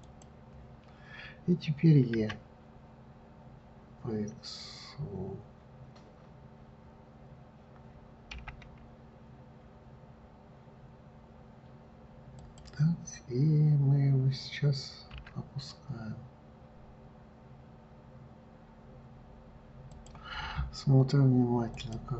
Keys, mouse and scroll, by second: 0.1 click, 0.4 click, 2.5 e, 15.5 s.